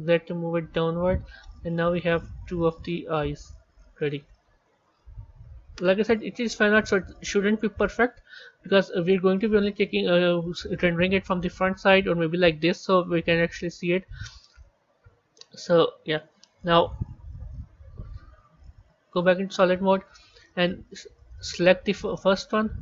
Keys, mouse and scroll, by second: 2.4-4.8 middle drag, 4.8 KP_3, 7.0-9.3 middle drag, 9.3-11.2 scroll down 4, 11.2-14.3 middle drag, 15.3 a, 16.9 KP_1, 17.3-17.7 scroll down 3, 18.5 z, 19.8-20.5 scroll up 3, 20.5-21.1 scroll up 2, 21.1-22.1 middle drag, 22.1 click.